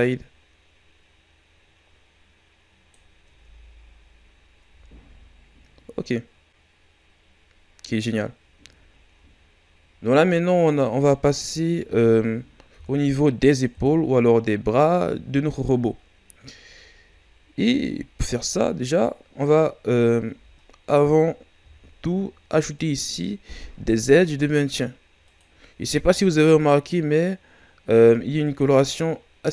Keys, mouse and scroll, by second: 3.3 Tab, 4.0 scroll down 3, 4.6 a, 4.9 scroll down 2, 5.9 scroll up 2, 8.4-8.9 scroll down 2, 8.9 shift+scroll up 2, 11.1 shift+scroll down 1, 11.7-12.7 scroll up 2, 12.7 KP_3, 13.7 KP_1, 17.9-18.5 shift+scroll up 7, 20.3 Tab, 21.5 ctrl+r, 25.8 ctrl+r, 28.1 Tab, 29.1 scroll down 2.